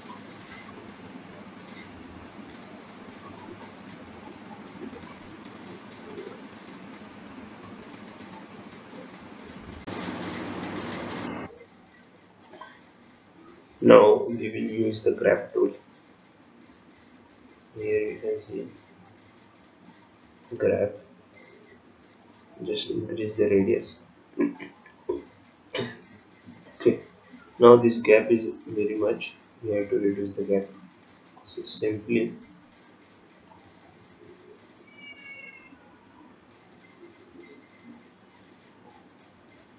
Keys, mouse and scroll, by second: 1.4 click.